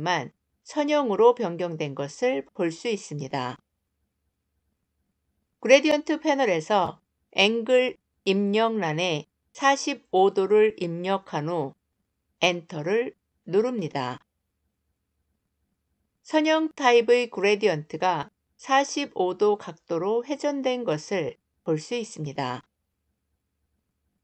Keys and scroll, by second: 12.4 Return.